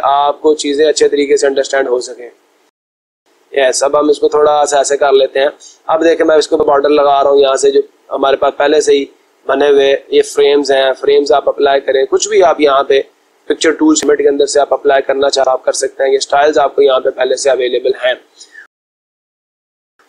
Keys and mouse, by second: 2.0-3.4 drag, 4.3 click, 9.3 click.